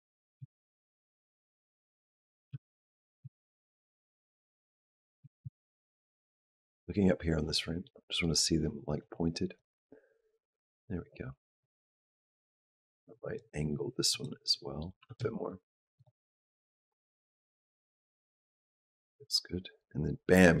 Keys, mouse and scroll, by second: 0.2 g, 2.1 click, 2.3 g, 2.7 click, 3.1 g, 5.1 r, 7.7 middle click, 9.5 click, 13.9 click, 14.3 middle click, 14.8 r, 16.9 click.